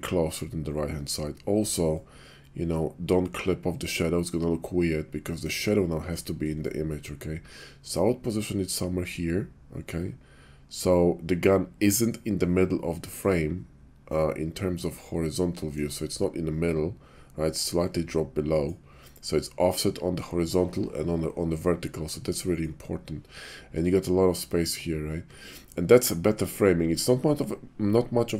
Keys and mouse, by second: 1.9-5.5 shift+middle drag, 6.6-15.7 shift+middle drag.